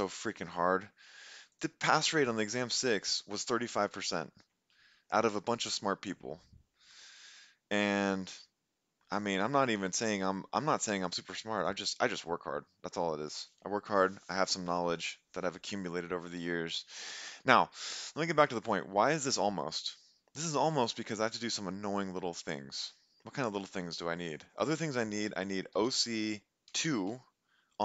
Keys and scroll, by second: 25.5-26.7 typing.